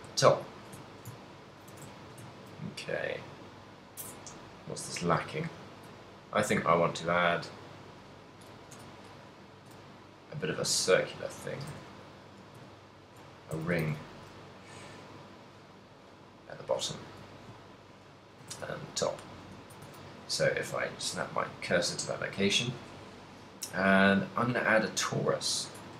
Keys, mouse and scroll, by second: 0.8 shift+click, 1.0 shift+middle click, 1.3 ctrl+middle click, 1.8 a, 2.3 shift+middle click, 2.8 middle click, 5.2 z, 5.8 right click, 6.2 shift+right click, 6.7 shift+right click, 7.0 shift+right click, 7.2 shift+right click, 7.7 shift+right click, 8.0 shift+right click, 8.8 KP_1, 9.4 g, 11.7 shift+click, 11.9 a, 12.4 g, 13.3 shift+click, 13.6 a, 17.3 shift+middle click, 17.6 ctrl+middle click, 18.3 right click, 18.6 shift+s, 19.6 a.